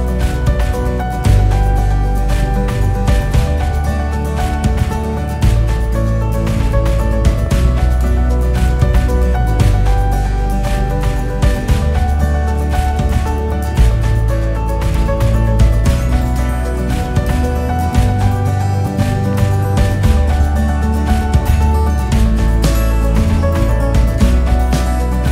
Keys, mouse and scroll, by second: 0.6 g, 2.9 s, 4.2 s, 5.6 r, 7.3 g, 8.8 KP_3, 9.7 g, 12.0 KP_1, 12.6 click, 13.0 scroll up 1, 13.4-14.1 scroll down 2, 14.1 click, 14.9 s, 16.3 g, 18.7-19.8 drag, 19.8-20.2 scroll up 1, 20.2-21.2 scroll down 1, 21.2 click, 23.9 click, 24.6 space, 24.8 click, 24.9 space.